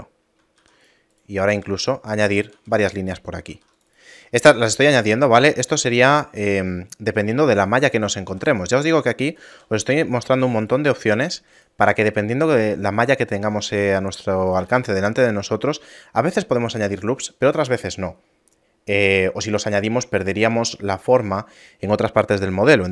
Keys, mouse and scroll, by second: 0.6 ctrl+r, 4.2 a, 5.0 ctrl+Tab, 5.8 right click, 6.4 shift+right click, 8.3 s, 9.6 a, 10.0 shift+middle click, 10.6 right click, 11.6 right click, 11.7 shift+right click, 13.6 s, 14.6 a, 15.7 shift+middle click.